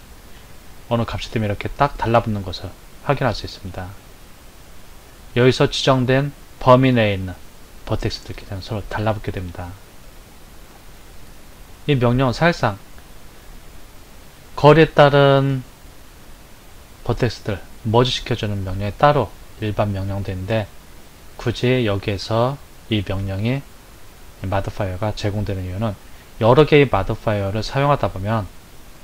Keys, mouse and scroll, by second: 3.9-7.0 drag, 9.6-12.8 drag.